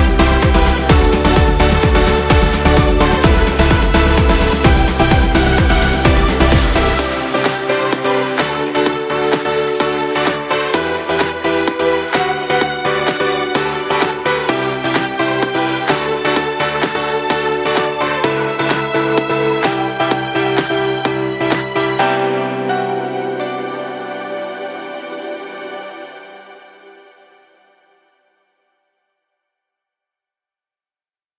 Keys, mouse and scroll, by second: 0.1-1.1 scroll up 2, 1.1 i, 3.0 e, 6.0 scroll down 2, 6.1 middle click, 7.0 scroll up 1, 7.2 middle click, 7.7-8.8 scroll up 1, 8.8-9.9 drag, 10.6 alt+shift+click, 11.7 alt+shift+click, 12.6 alt+shift+click, 13.0 scroll down 1, 13.2 middle click, 14.1-14.6 scroll up 2, 14.6-15.8 middle drag, 15.8 alt+shift+click, 16.6-18.3 middle drag, 18.3 ctrl+b, 22.1 click, 23.2 alt+shift+click, 24.2 ctrl+b, 26.8 click, 27.2 middle click, 27.9 ctrl+r, 28.8 scroll down 4, 29.4 middle click, 29.9 scroll up 3, 30.3 middle click, 31.2 ctrl+r.